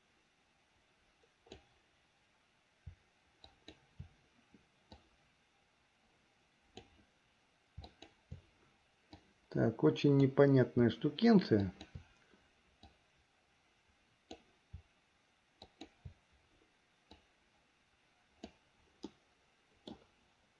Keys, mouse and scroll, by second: 3.5 shift+click, 5.1-7.1 drag, 7.9 shift+click, 9.4-10.4 drag, 11.8 shift+click, 13.0-14.5 drag, 15.7 shift+click, 17.3-18.7 drag, 19.3 middle click.